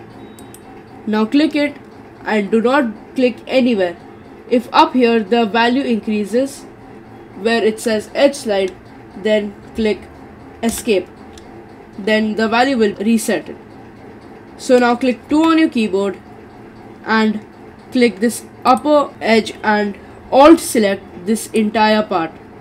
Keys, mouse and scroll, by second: 12.9-14.2 middle drag, 15.3 2, 17.7-18.7 scroll up 2, 18.7 click, 21.5 alt+click.